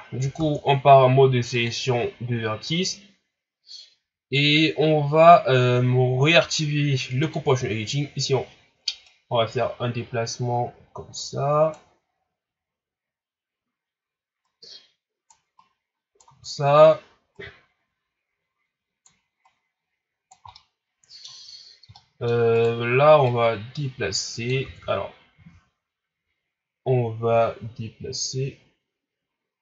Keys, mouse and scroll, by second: 0.4 ctrl+Tab, 2.3-5.3 scroll up 1, 7.2 click, 9.0 right click, 14.4 right click, 15.5 right click, 17.3 right click, 19.4 right click, 20.5-22.5 middle drag, 22.5 right click, 23.2 click, 24.6 ctrl+z.